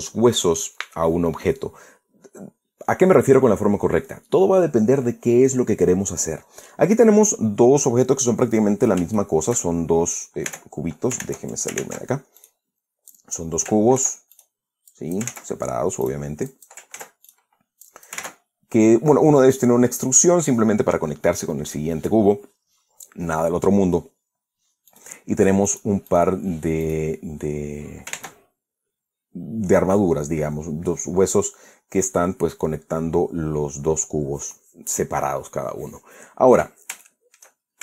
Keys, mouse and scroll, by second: 9.3 scroll down 2, 9.8-10.3 shift+middle drag, 11.1 Tab, 11.8 ctrl+Tab, 13.0 ctrl+middle click, 13.1 click, 13.2 middle drag, 13.8-14.2 drag, 14.6 ctrl+z, 15.0 ctrl+drag, 15.6-16.0 ctrl+drag, 16.0 ctrl+z, 16.7 drag, 17.1-17.5 drag, 17.6 ctrl+z, 17.9 ctrl+drag, 18.5-18.9 drag, 18.8 ctrl+z, 25.6 click, 26.3 right click, 26.7 right click, 27.5 right click, 28.8 ctrl+Tab, 37.7-37.8 shift+middle drag.